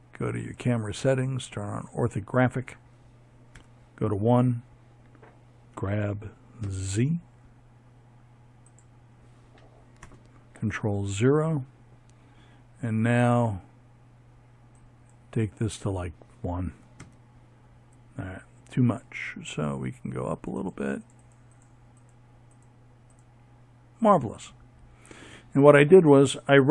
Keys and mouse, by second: 1.2 KP_1, 3.4 g, 7.7 ctrl+KP_0, 18.1-22.5 drag.